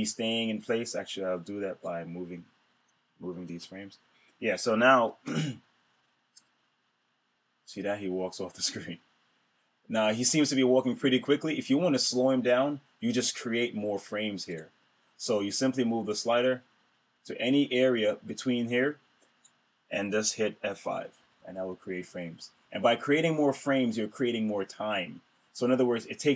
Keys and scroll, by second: 3.3 shift+F5, 5.1 super+Return, 21.1 F5.